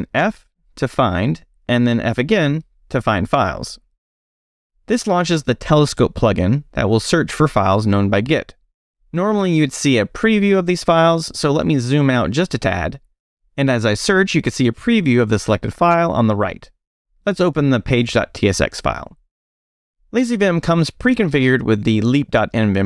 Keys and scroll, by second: 0.6 f, 3.5 f, 10.8 super+-, 11.4 super+=, 14.4-15.7 typing, 16.3 Up, 16.9 Down, 17.9 super+o, 19.1 Return, 19.4 Return.